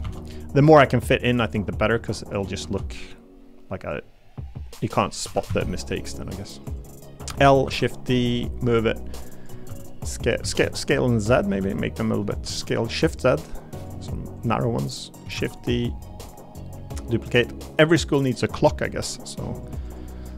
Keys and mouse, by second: 0.0 shift+d, 0.9 click, 1.8 s, 2.2 click, 2.6 shift+d, 3.0 click, 4.0 click, 5.2 r, 5.5 z, 7.2 l, 7.6 shift+d, 8.6 click, 9.7-12.4 typing, 11.2 click, 13.7 click, 15.3 shift+d, 16.3-18.4 drag, 19.8 click.